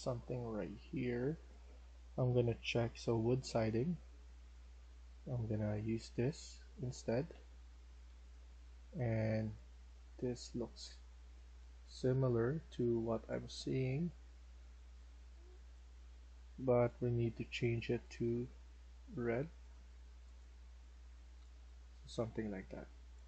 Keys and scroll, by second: 6.0-8.0 typing, 10.9-13.5 typing, 15.4-16.2 typing, 20.5-22.8 typing.